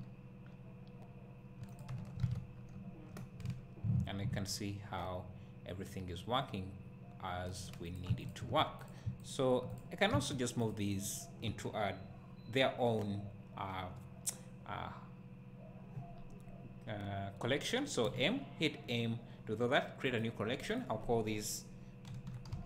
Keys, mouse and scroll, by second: 1.8-2.2 drag, 2.2 alt+a, 2.5 scroll down 2, 2.8 `, 3.2 scroll up 1, 3.6 scroll down 1, 4.6-8.0 right drag, 8.0 click, 8.3 shift+click, 9.3 shift+click, 10.3 shift+click.